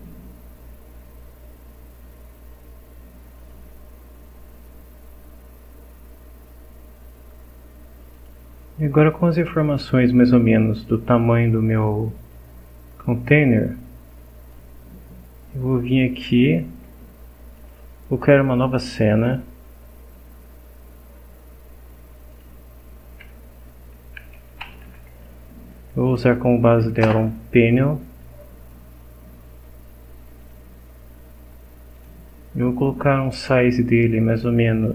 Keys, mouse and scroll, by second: 3.4 click, 7.1 scroll down 1, 8.1 click, 9.1 scroll down 1, 14.5 click, 16.5 click, 17.6 click, 19.0 click, 22.3 click, 23.9-25.3 typing, 25.8 Down, 26.0 Up, 27.0 Return, 29.3 scroll up 2, 30.4 click, 32.0 click.